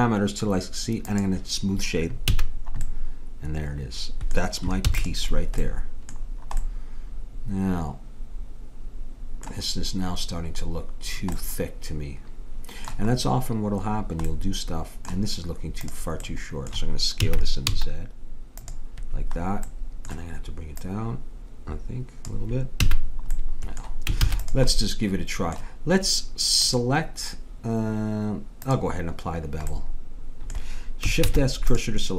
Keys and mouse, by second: 1.1-2.9 drag, 2.4 a, 4.9 ctrl+s, 11.6 middle click, 15.9-17.6 drag, 17.3 s, 21.8-22.9 drag, 22.9 a, 24.2 ctrl+s, 26.6-28.5 drag, 28.7-30.4 drag, 30.5 middle click, 31.3 shift+s.